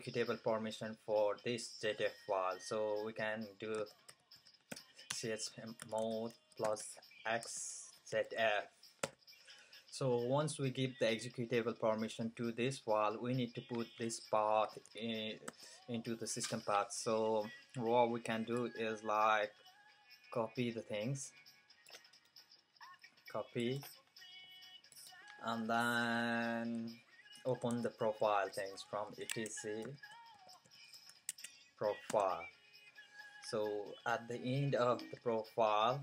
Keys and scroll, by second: 3.5-8.2 typing, 14.3-15.5 typing, 27.2-31.4 typing, 29.3 Tab, 33.6-36.0 typing.